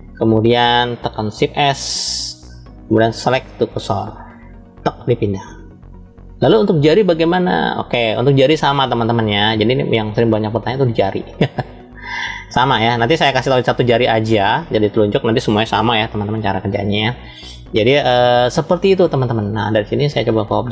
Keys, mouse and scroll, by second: 1.6 shift+s, 5.7-7.3 scroll down 2, 7.3-9.0 middle drag, 9.4-10.2 scroll up 1, 11.7-13.4 middle drag, 14.0 shift+middle click, 19.9-20.7 drag.